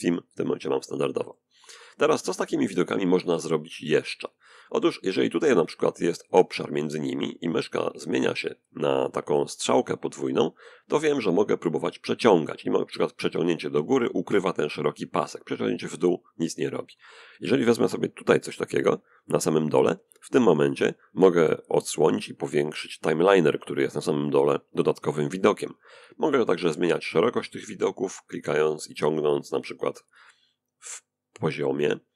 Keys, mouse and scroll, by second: 0.5-1.6 middle drag, 9.3-16.5 drag, 18.9-21.7 drag, 26.4 click, 27.0-32.1 drag.